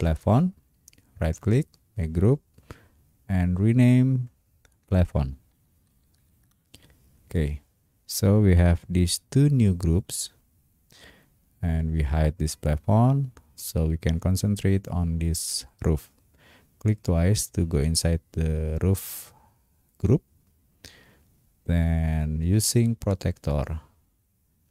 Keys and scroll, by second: 5.0-6.8 typing.